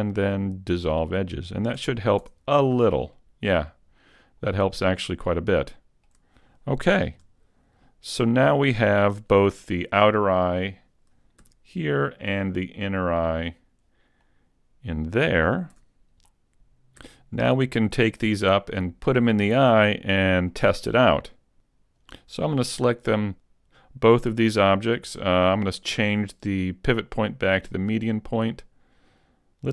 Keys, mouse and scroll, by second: 1.8 a, 2.2 Tab, 2.6-3.2 scroll down 1, 3.2 middle click, 3.2-4.7 scroll down 2, 4.7-5.8 scroll down 5, 5.8 shift+middle click, 7.1 KP_5, 7.8-9.2 scroll up 3, 8.3 middle click, 11.4 z, 13.0 click, 14.2 middle click, 15.8 a, 16.3 middle click, 19.1 z, 19.8-20.5 scroll down 2, 20.5 middle click, 23.4 shift+click, 25.6 click, 28.6-29.1 scroll down 3.